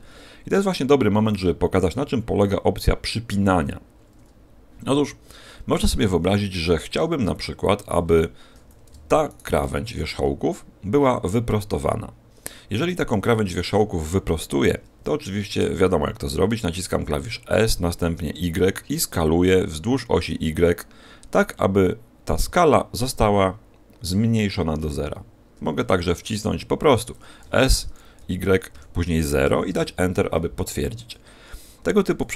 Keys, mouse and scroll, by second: 1.2-2.7 scroll down 1, 5.2-6.0 scroll up 2, 6.0 shift+middle click, 6.0-7.0 scroll up 2, 9.2 alt+shift+right click, 12.8 shift+middle click, 17.2 s, 27.4 s.